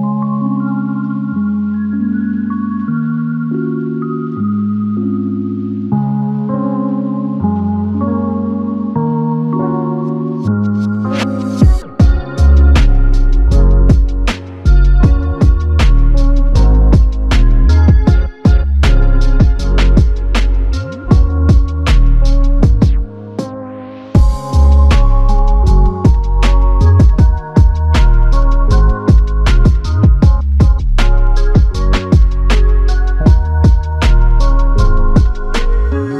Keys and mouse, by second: 1.5 double click, 11.7 ctrl+click, 12.8 ctrl+click, 14.5 alt+click, 18.5 alt+click, 21.0 alt+l, 21.2 ctrl+click, 22.7 ctrl+click, 25.4 alt+click, 28.2 alt+click, 32.3 alt+click, 34.4 alt+click.